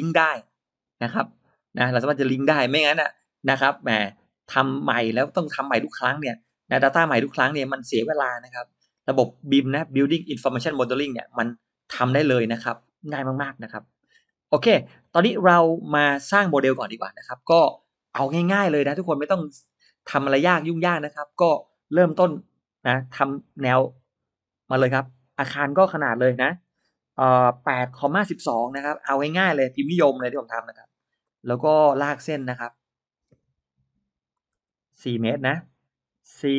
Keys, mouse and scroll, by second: 22.5-23.0 scroll up 1, 23.0 r, 23.9 click, 28.0 8, 28.6 1, 30.7 space, 30.8-31.5 middle drag, 31.7-32.2 drag, 32.4 middle click, 33.2 m, 34.2 click, 36.5 4.